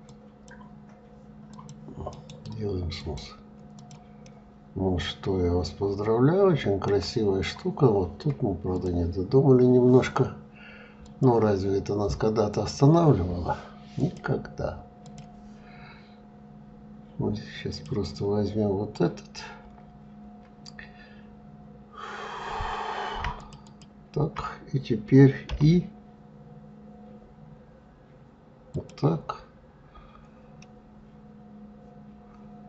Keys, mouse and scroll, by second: 1.1 click, 1.7-3.3 right drag, 3.3 click, 3.8-6.8 middle drag, 7.1 scroll up 2, 8.3 click, 10.6-16.6 drag, 17.3 click, 23.0 shift+click, 23.2 shift+click, 25.1 i, 30.2-32.6 middle drag.